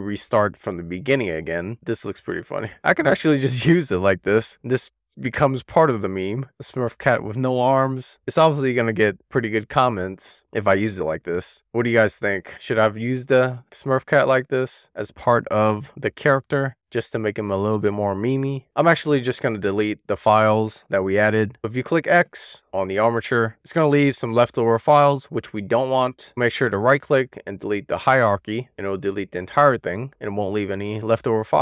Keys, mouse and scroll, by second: 1.6 middle click, 2.0 click, 2.7-3.3 scroll up 2, 3.3-3.7 scroll down 1, 3.8-5.9 middle drag, 10.4-18.4 middle drag, 18.5 click, 19.5 click, 25.2 super+z, 26.4-27.5 right drag, 28.4 click, 28.9 right click, 30.6 click, 31.0-31.6 right drag.